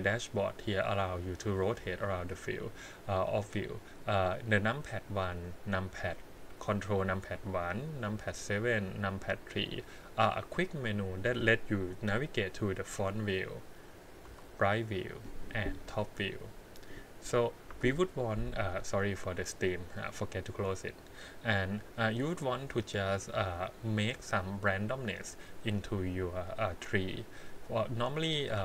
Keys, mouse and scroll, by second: 0.3 click, 0.5 click, 2.1 click, 12.7 KP_1, 14.2 KP_3, 15.7 KP_7, 17.7 KP_1, 22.3 g, 27.5 click.